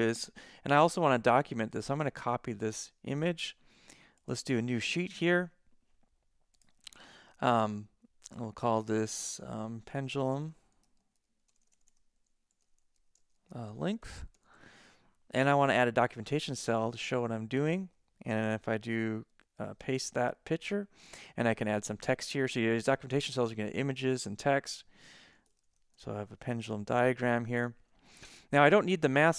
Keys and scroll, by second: 10.0-15.0 typing, 19.6 super+v, 22.1 Return, 25.2-27.4 typing.